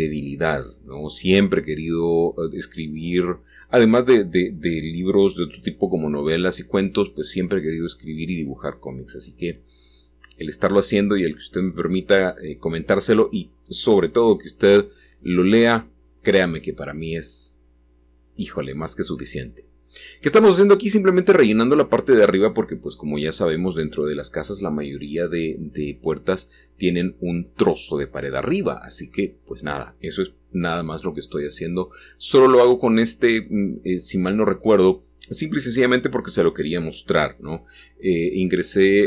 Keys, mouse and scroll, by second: 2.5 click, 6.5 2, 7.6 click, 8.6 click, 10.1 shift+click, 12.8 click, 13.7 shift+click, 15.3 f, 18.4-19.5 shift+drag, 19.6-20.7 shift+drag, 21.9-23.9 middle drag, 24.1-33.2 scroll down 4, 28.8-33.2 shift+middle drag, 35.1 click, 36.5-37.8 scroll down 2, 37.8 scroll down 1, 38.6-39.0 drag.